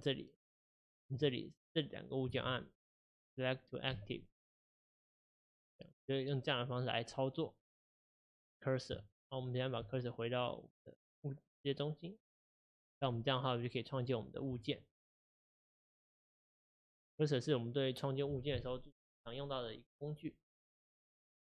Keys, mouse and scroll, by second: 0.7 shift+click, 2.4 shift+s, 4.9 ctrl+z, 6.1-7.4 middle drag, 7.4 click, 9.9 shift+s, 12.8 click, 13.2-14.1 middle drag, 14.1 click, 14.7 shift+click, 15.3 shift+drag, 15.7 shift+click, 16.3-19.3 middle drag.